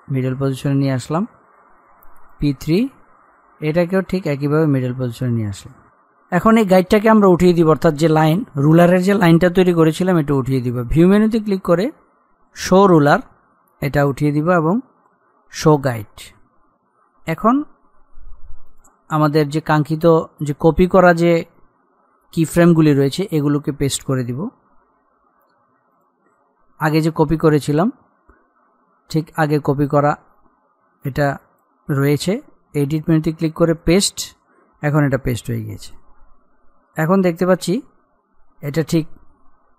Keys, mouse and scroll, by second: 12.7 click, 16.9-17.3 scroll down 1, 18.7 click, 25.3 click, 25.9 shift+click, 31.4 click, 33.8-39.7 drag.